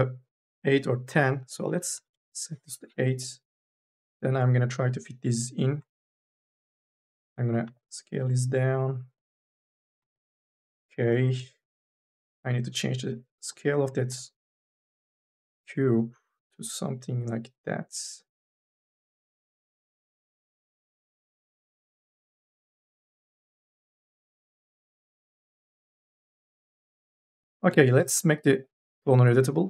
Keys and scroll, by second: 2.0 Return, 10.8 n, 28.8 c.